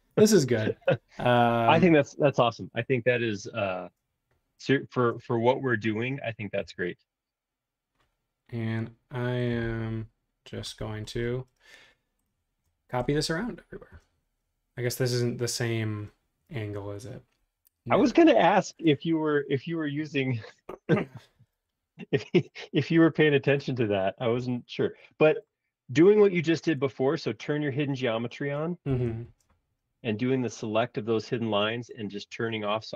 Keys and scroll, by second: 2.4 space, 6.6 m, 21.3 super+z, 24.1 space, 24.3 Escape, 28.9 shift+g.